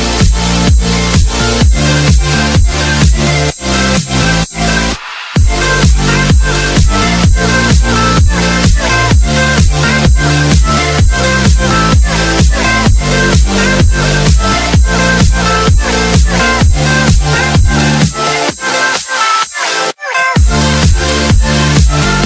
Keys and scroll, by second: 0.9 Escape, 8.5 space, 9.6 t, 9.9 r, 11.6 Escape, 18.0 ctrl+r, 21.0 ctrl+r.